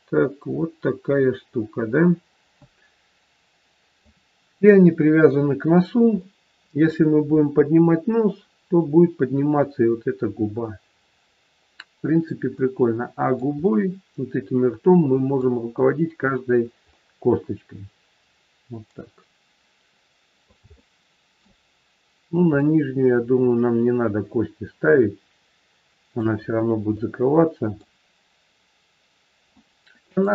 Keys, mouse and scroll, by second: 4.6-4.9 scroll down 1, 4.9 middle click, 6.1 middle click, 11.9-12.6 scroll down 1, 12.6 middle click, 13.3 scroll down 1, 13.6 middle click, 16.9 middle click, 20.7 shift+middle click, 22.1-22.4 scroll up 1, 22.4 middle click, 26.4 scroll down 2, 27.0 shift+middle click, 29.4 middle click.